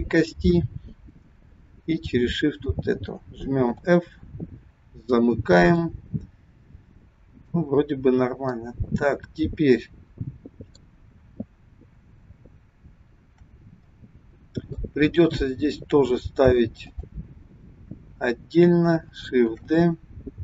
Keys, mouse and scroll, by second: 3.7 f, 4.8-5.7 scroll down 3, 5.7 scroll up 1, 5.8 middle click, 8.4 middle click, 13.9 middle click, 15.0 scroll down 2, 15.5-15.9 scroll up 1, 16.8 click, 19.4 shift+d.